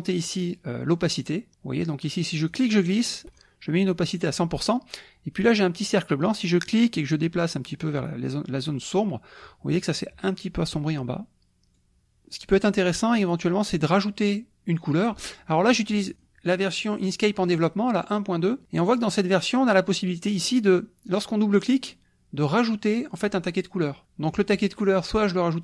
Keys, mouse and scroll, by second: 2.5-3.6 drag, 6.7-9.6 drag, 11.8 click, 16.2 click, 17.0 click, 18.8 click, 20.2-23.7 drag.